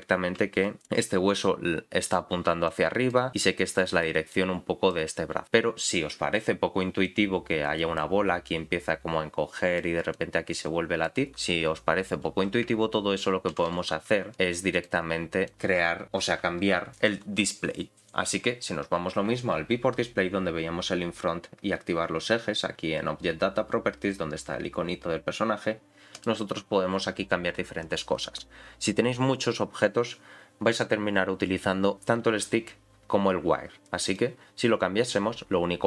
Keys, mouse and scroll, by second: 0.6 click, 2.0 click, 2.7 click, 3.6 click, 4.3 click, 7.0 click, 8.5-9.8 drag, 10.1 click, 13.5-14.3 ctrl+z, 14.7 click, 26.1-34.2 drag.